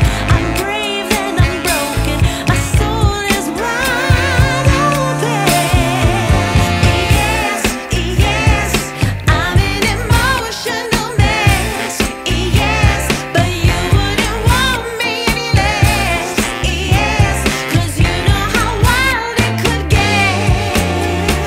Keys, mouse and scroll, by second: 4.8 scroll down 1, 4.8 middle click, 5.9 double click, 8.4 double click, 8.5 5, 8.6 Tab, 17.3 Tab, 17.7 double click.